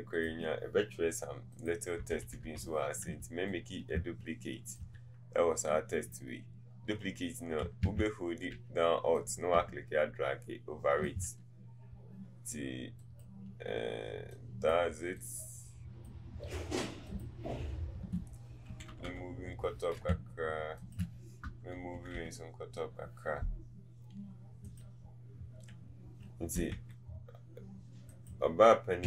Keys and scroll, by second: 2.1 Up, 7.9 ctrl+z, 26.7 t.